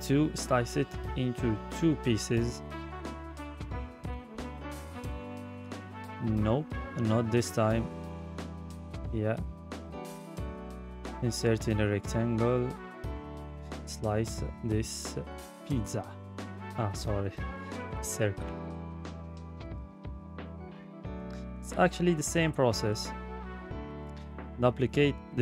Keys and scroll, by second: 25.1 ctrl+d.